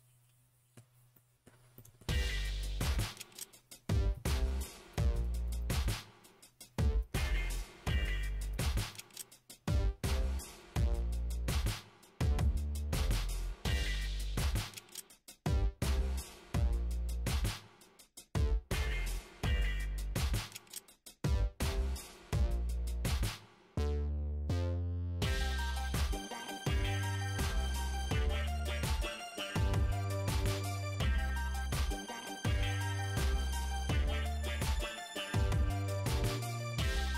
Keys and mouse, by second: 2.4 right click, 3.7 3, 3.9 right click, 4.3 right click, 4.8 right click, 5.5 g, 7.6 g, 10.5-18.2 typing, 10.6 right click, 10.9 middle click, 11.4 right click, 11.6-17.7 middle drag, 12.2 right click, 13.1 right click, 13.7 right click, 14.0 right click, 14.6 right click, 15.0 right click, 16.8 right click, 17.2 right click, 17.7 right click, 17.8-19.2 middle drag, 18.2 right click, 19.2 right click, 19.3 middle click, 19.3-21.4 typing, 19.5 right click, 20.2 right click, 20.3 middle click, 20.6 right click, 20.8 middle click, 21.0 right click, 21.1 middle click, 21.3 right click, 21.4-37.1 middle drag.